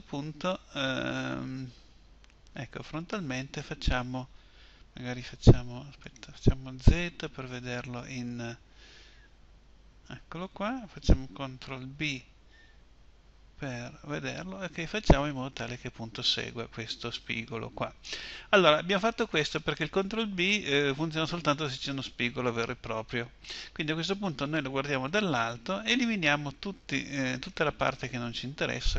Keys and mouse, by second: 6.0 click, 6.8 z, 11.9 ctrl+b.